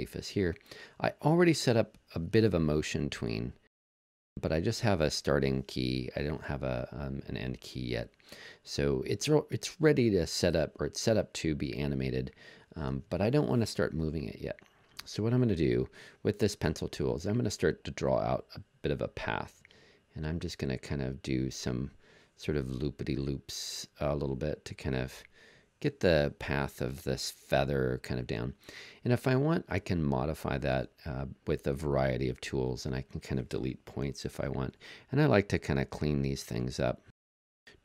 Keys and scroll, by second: 34.0 BackSpace, 35.1 BackSpace, 36.5 BackSpace, 37.3 BackSpace.